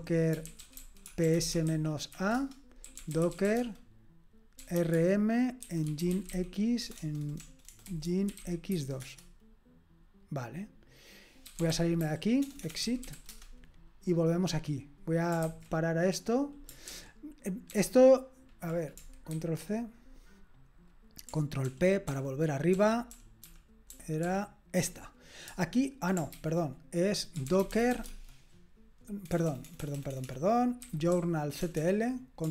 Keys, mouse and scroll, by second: 0.0-9.2 typing, 11.3-13.6 typing, 15.4 ctrl+c, 16.9 ctrl+o, 17.7 ctrl+p, 19.3 ctrl+c, 21.7 ctrl+p, 22.1 ctrl+p, 22.8 ctrl+p, 23.1 ctrl+p, 23.9 ctrl+p, 24.2 ctrl+p, 26.3 ctrl+c, 27.1-31.6 typing.